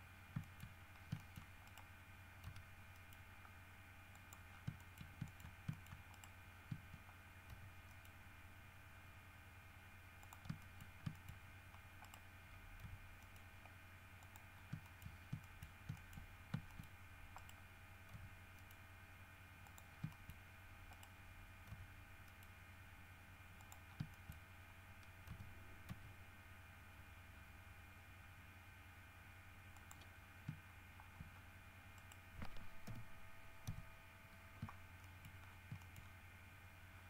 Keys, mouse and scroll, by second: 0.4-1.3 scroll up 4, 0.6 shift+middle click, 1.3 shift+middle click, 1.8 shift+right click, 2.6 g, 3.1 middle click, 4.3 click, 4.7 scroll down 3, 5.0 shift+middle click, 5.4 shift+middle click, 5.9 shift+middle click, 6.3 shift+middle click, 6.7 shift+scroll up 1, 7.7 g, 8.1 middle click, 10.4 shift+click, 10.8 shift+middle click, 11.3 shift+middle click, 11.6 shift+scroll up 1, 12.2 right click, 13.0 g, 13.4 middle click, 14.4 middle click, 14.7 scroll down 1, 15.0 shift+middle click, 15.6 shift+middle click, 16.1 shift+middle click, 16.4-16.7 shift+scroll up 1, 16.9 shift+middle click, 17.5 right click, 18.3 g, 18.7 middle click, 19.8 click, 20.3 shift+middle click, 20.7 shift+scroll up 2, 21.1 right click, 21.9 g, 22.5 middle click, 23.8 middle click, 24.1 scroll down 3, 24.3 shift+middle click, 25.5 g, 29.9 middle click, 31.5 shift+scroll down 2, 32.1 middle click, 33.0 l, 33.8 KP_3, 35.2 shift+middle click, 35.6-36.4 shift+scroll up 2, 36.0 shift+middle click.